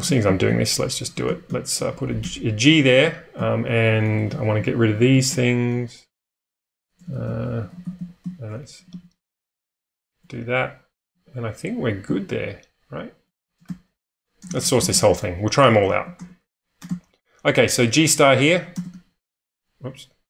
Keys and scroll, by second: 0.0-2.5 typing, 5.7-10.0 typing, 11.1-17.1 typing, 18.5-19.3 typing.